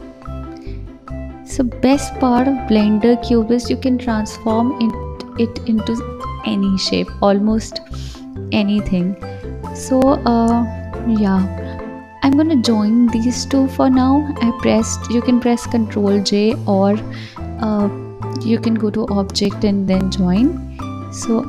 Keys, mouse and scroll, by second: 0.9 KP_7, 2.1 g, 4.7 KP_1, 5.3 click, 8.0-8.8 scroll down 1, 8.8 drag, 11.2-13.7 drag, 13.7 ctrl+j, 15.3 g, 17.5 KP_7, 18.6 g, 20.2 KP_1, 20.6 scroll up 2.